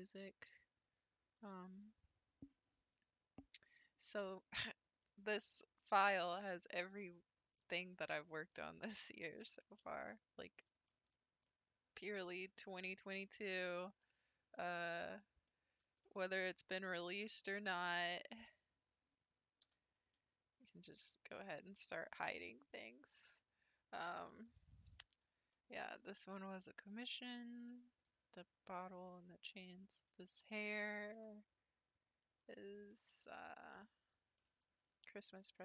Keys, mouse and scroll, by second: 6.1 scroll down 2, 6.5 scroll up 1, 7.0-16.4 middle drag, 16.4-17.1 scroll up 5, 17.1-17.7 shift+middle drag, 17.7 scroll up 1, 18.3 click, 19.7 h, 20.2 scroll down 2, 21.0 click, 22.2 h, 22.7-23.5 middle drag, 23.5-24.4 scroll down 1, 24.5-31.4 shift+middle drag, 31.4-32.0 scroll up 4, 32.0-32.4 scroll down 3, 32.5-35.6 shift+middle drag.